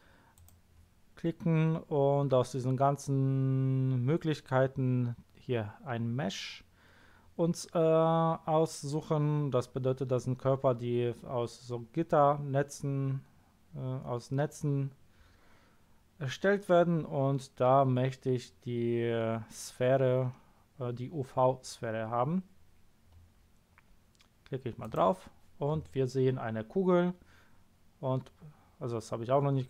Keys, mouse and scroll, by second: 0.3 click, 24.8 click, 26.3 scroll up 2, 28.2 scroll down 2, 29.5-29.6 scroll up 2.